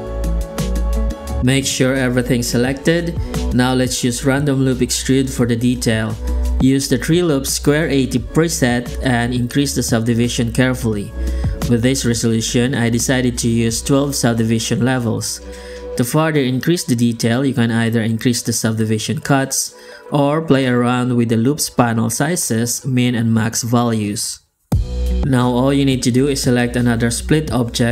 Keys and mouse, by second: 1.2 right click, 3.3 shift+g, 3.9 Tab, 4.9 Tab, 5.2 click, 6.1 click, 6.7 shift+q, 26.4 click, 27.1 shift+r.